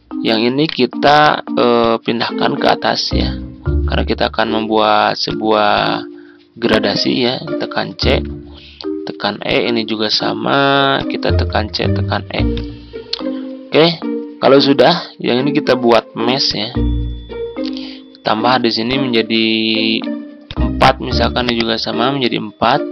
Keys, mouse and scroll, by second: 0.6 right click, 1.7 click, 5.2 click, 7.6-8.0 typing, 9.4-13.1 drag, 11.5-11.9 typing, 14.1 ctrl+scroll up 1, 16.4-22.9 drag.